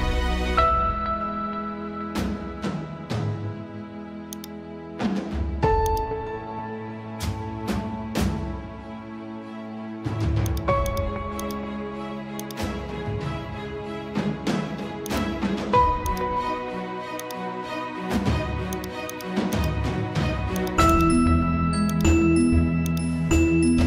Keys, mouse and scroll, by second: 18.0 ctrl+e.